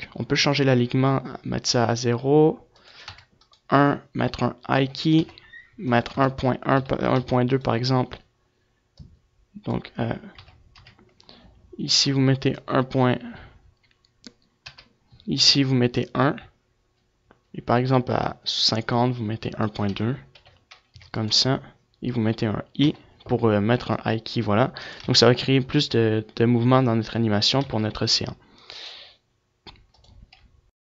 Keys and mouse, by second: 3.8 |, 4.4-6.8 drag, 7.7-8.7 drag, 8.7 ctrl+z, 9.2 ctrl+z, 9.5 ctrl+z, 10.8-13.0 drag, 14.3 i, 15.1-17.0 drag, 19.0-22.2 drag, 22.2 i, 23.4-24.5 drag, 24.5 alt+a, 24.7 click, 27.3 alt+a.